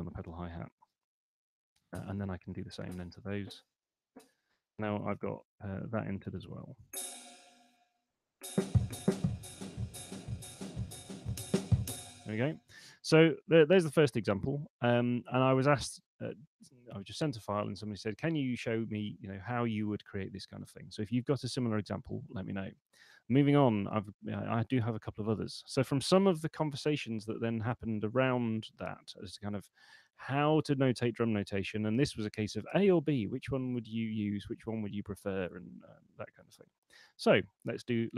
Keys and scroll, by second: 0.6 6, 0.8 space, 5.2 Escape, 7.4 p, 12.1 space.